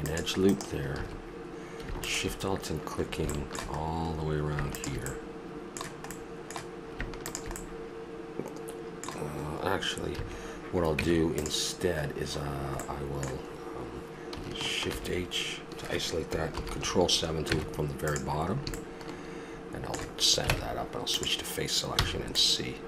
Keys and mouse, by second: 1.0 a, 2.0 click, 4.7 middle click, 5.3-9.4 middle drag, 10.2 a, 11.0 Tab, 12.8-14.1 middle drag, 14.9 shift+h, 16.5 ctrl+KP_7, 17.4 Tab, 20.5 ctrl+Tab, 22.0 c.